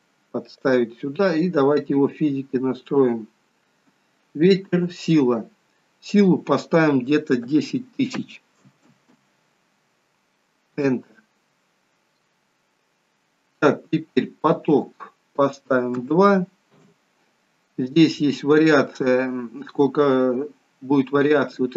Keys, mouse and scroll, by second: 6.1 click, 8.8 0, 14.6 click.